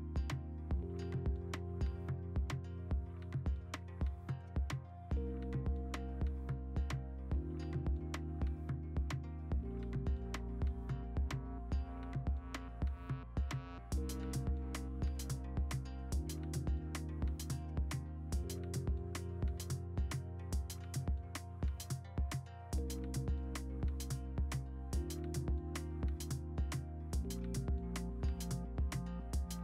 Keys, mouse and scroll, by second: 2.1 ctrl+alt+g, 2.2 b, 4.1 ctrl+d, 4.6 0, 5.5 ctrl+z, 8.7 4, 10.6 8, 12.3-13.1 typing, 13.3 ctrl+z, 13.8 ctrl+z, 21.5 ctrl+z, 23.4 ctrl+z, 25.4 v, 25.8 ctrl+u, 26.1 Escape, 26.4-27.6 typing, 26.9 click, 27.6 ctrl+u, 29.1 click.